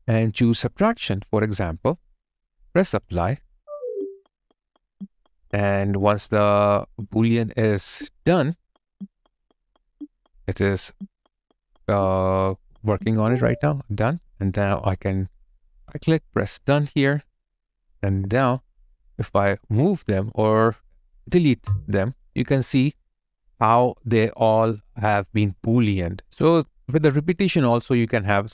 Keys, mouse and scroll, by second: 15.6 right click, 17.6 double click, 22.1 Delete, 22.4 alt+click, 26.4 alt+right click, 26.7 alt+click, 27.2 alt+middle click, 27.7 alt+right click, 28.1 alt+click.